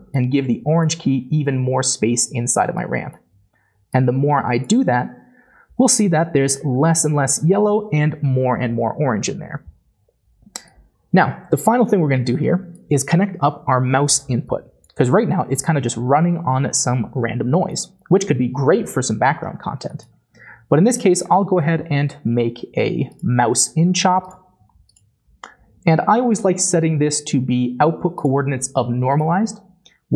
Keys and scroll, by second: 21.6 m, 21.8 o, 21.9 u, 25.7 typing.